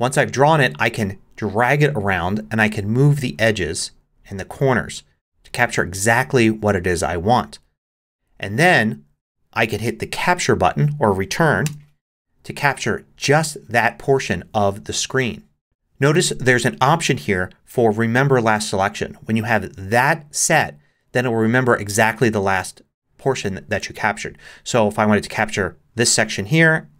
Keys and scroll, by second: 11.6 Return.